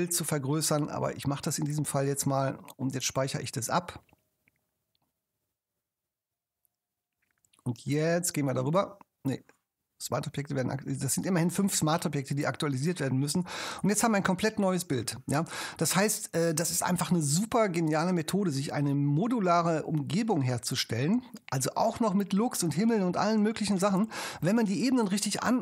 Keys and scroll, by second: 3.2 super+s.